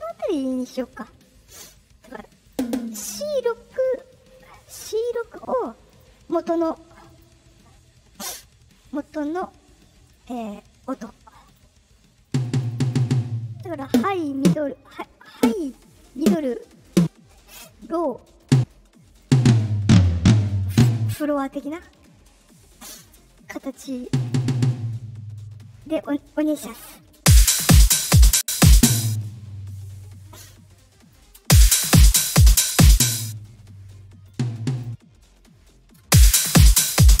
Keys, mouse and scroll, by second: 2.4 click, 2.5 click, 4.3 right click, 5.0 click, 5.8 click, 7.0 click, 10.0 right click, 11.4 click, 12.2 click, 12.4 click, 12.6 click, 12.8 click, 12.9 click, 13.8 click, 14.3 click, 15.3 click, 16.1 click, 16.8 click, 17.9 right click, 18.3 click, 19.2-21.0 drag, 21.6 right click, 22.4 right click, 24.0 click, 24.2 click, 24.5 click, 25.7-26.8 middle drag, 27.1 space, 28.6 click, 28.8 space, 30.7 click, 31.3 space, 31.7 middle click, 31.7 scroll up 2, 33.0 space, 34.2 click, 35.5-35.9 scroll up 2, 35.9 space.